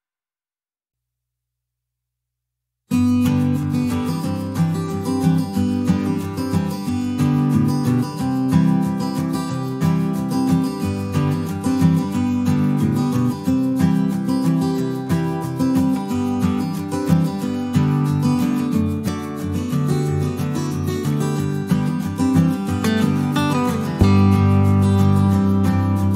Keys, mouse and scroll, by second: 0.7 click, 2.1 click, 4.0 click, 5.2 click, 6.3 click, 7.5 click, 8.1 click, 8.5 click, 8.8 click, 10.0 middle click, 10.8 click, 11.2 middle click, 14.6 click, 17.2 click, 18.8 click, 20.3 click, 21.4 click, 22.0 click, 22.4 click, 22.8 click, 23.9 middle click, 26.0 click.